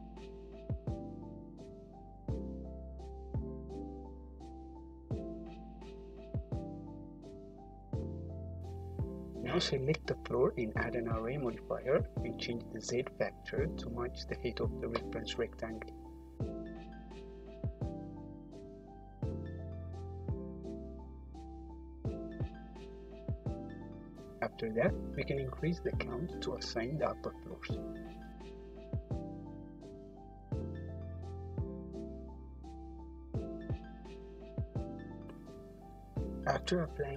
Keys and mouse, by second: 0.5-7.7 drag, 8.0 click, 10.0-17.0 drag, 19.1-23.2 shift+drag, 22.7 `, 24.1 click, 24.5 `, 26.1-27.1 drag, 29.0 `, 31.3-32.3 drag, 35.4 h, 36.8 click.